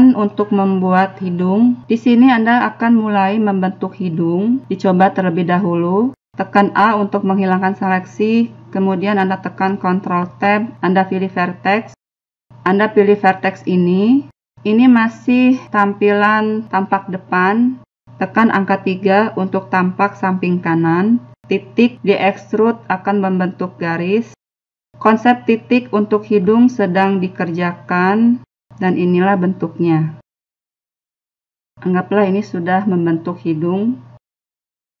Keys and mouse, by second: 4.0 a, 7.4 ctrl+Tab, 14.3 right click, 14.9-15.9 middle drag, 16.4 KP_1, 18.1 KP_3, 21.0-23.7 typing, 23.6 click, 24.4 middle click, 25.2 e, 26.1 e, 28.4 e, 31.1 middle click, 32.6 right click, 32.9 g, 33.7 middle click, 34.2 right click, 34.6 click.